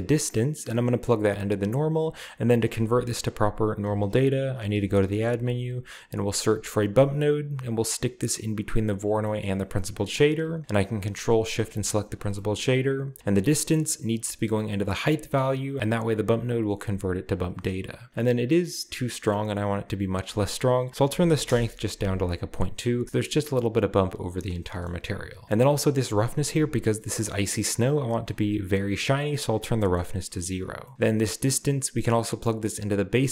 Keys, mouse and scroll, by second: 0.1-1.8 drag, 4.0-5.3 typing, 4.6 click, 6.6 click, 8.9 click, 9.6-10.6 drag, 11.4-13.0 ctrl+shift+drag, 12.5-13.1 scroll up 1, 13.1-15.0 drag, 15.4 click, 17.2 click, 20.1 click, 21.0-21.4 typing, 21.5 Return, 23.8 scroll down 2, 24.5-25.3 scroll down 2, 24.7-26.6 middle drag, 25.3 click, 25.7-26.6 scroll up 1, 26.7-27.5 scroll up 1, 28.3 middle click, 29.2 click, 29.8 middle click, 30.0 drag, 30.4-30.9 middle drag, 30.9-31.8 scroll down 1, 32.0-33.3 drag.